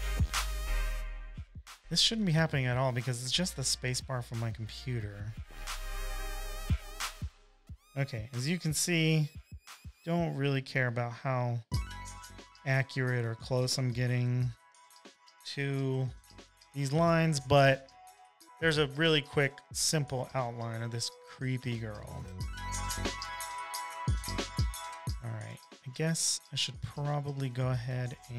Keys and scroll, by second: 18.0 super+-, 18.1 super+-, 18.3 super+-, 18.7-20.8 typing.